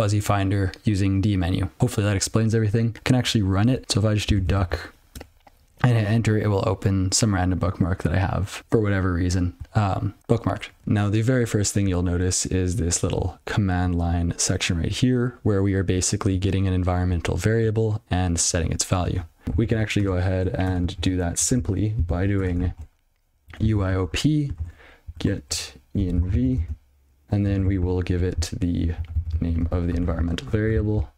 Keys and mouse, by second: 10.8 click, 12.5 click, 16.8 click, 17.8 click, 19.4 ctrl+/, 21.4 ctrl+p, 22.9-26.8 typing, 29.4 ctrl+b, 30.4 ctrl+alt+space.